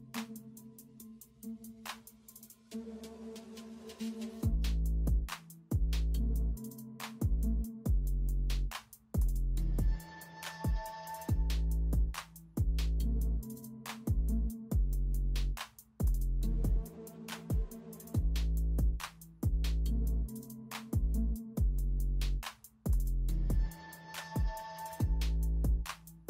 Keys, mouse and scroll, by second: 0.0-2.3 typing, 3.1 alt+z, 3.9 ctrl+alt+z, 4.5-4.9 typing, 6.5-6.9 typing, 8.7-26.2 typing, 25.2 ctrl+b.